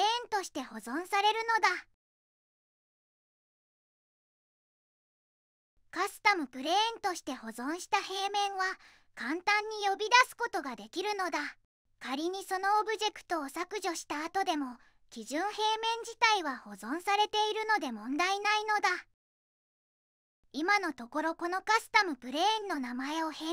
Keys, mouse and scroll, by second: 13.3 click, 15.0 click, 15.8 x.